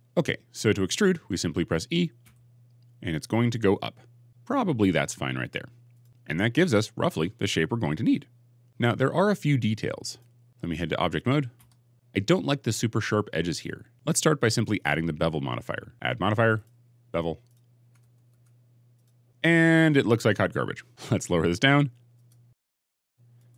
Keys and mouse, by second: 2.1 e, 4.6-8.6 middle drag, 9.9 click, 11.4 Tab, 16.4-19.0 drag.